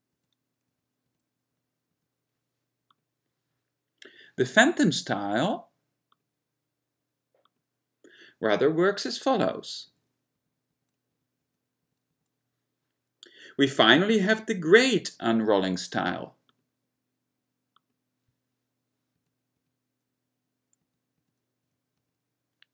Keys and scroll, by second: 0.3 F11, 0.8 F10, 1.2 F10, 1.6 F11, 2.0 F11, 9.5 F10, 10.0 F10, 10.5 F11, 10.8 F11, 11.2 F10, 11.5 F10, 12.0 F11, 12.2 F11, 19.3 F10, 19.7 F10, 20.9 F11, 21.3 F11, 21.8 F10, 22.1 F10.